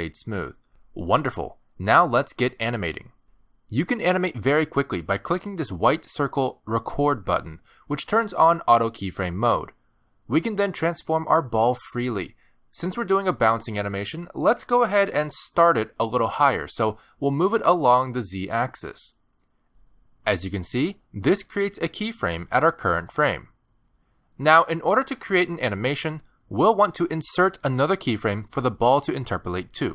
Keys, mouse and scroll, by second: 2.6-3.0 scroll up 4, 3.2 middle click, 4.0-4.4 scroll down 1, 4.5 shift+middle click, 5.5 scroll down 1, 5.6 middle click, 9.7 click, 12.3 middle click, 12.5 g, 14.8 scroll down 2, 15.2 shift+middle click, 15.5 middle click, 16.3 g, 18.4 shift+middle click, 18.7 middle click, 21.4 middle click, 21.5 middle click.